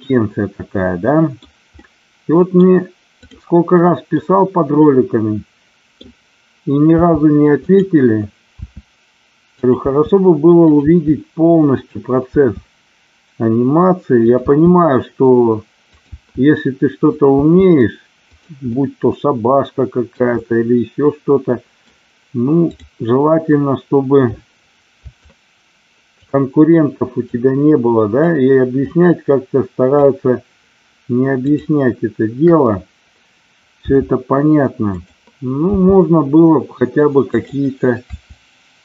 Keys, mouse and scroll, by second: 1.8 middle click, 3.2 click, 4.0-6.0 middle drag, 7.0 g, 7.5 click, 8.6 e, 9.5 click, 9.8 e, 10.8 e, 12.3 e, 14.3 e, 15.9 click, 16.2 e, 17.4 e, 18.3 click, 18.7-20.0 middle drag, 20.5-21.8 middle drag, 25.3 shift+click, 27.1 shift+click, 28.8-30.1 shift+drag, 31.4 shift+click, 33.8 r, 34.7 click, 35.7 g, 38.0 r.